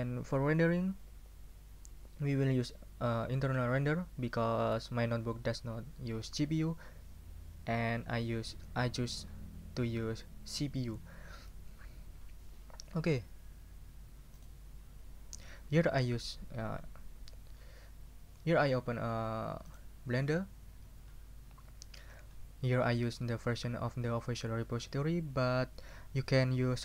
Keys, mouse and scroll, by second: 14.3 click, 19.7 click.